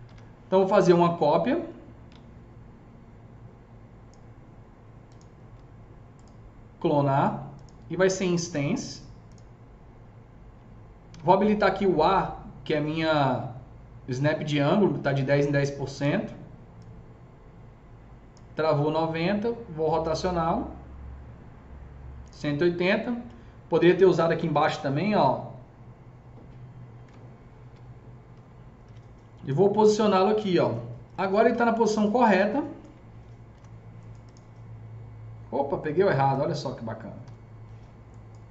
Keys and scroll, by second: 0.1-0.5 typing, 11.1 a, 28.7 w, 33.4 F3, 37.1 Delete.